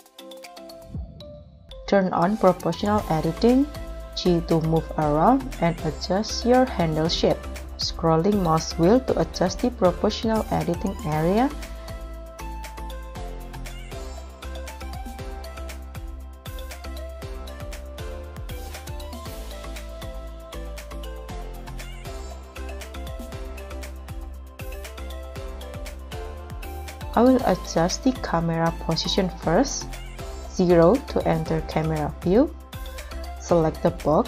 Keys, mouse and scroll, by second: 0.7 Escape, 1.7-2.8 scroll down 4, 4.1 g, 5.1 z, 6.1-6.7 scroll down 6, 7.3 scroll down 2, 12.4 double click, 12.8 double click, 13.2 g, 13.9 scroll up 2, 15.3 scroll down 2, 15.6-15.9 scroll up 2, 16.5 g, 17.0 y, 18.0 alt+z, 19.1-19.5 scroll up 5, 19.9-20.6 scroll up 1, 20.6 right click, 21.1 middle click, 21.6 scroll up 1, 21.7 middle click, 24.6-25.1 scroll down 6, 25.2 middle click, 26.7 scroll down 1, 26.8 middle click, 30.8-31.3 scroll down 1, 31.3 KP_0.